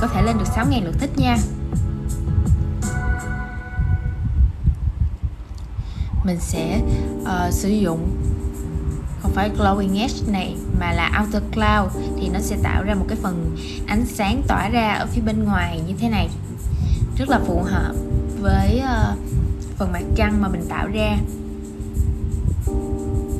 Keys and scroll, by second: 20.8 super+}.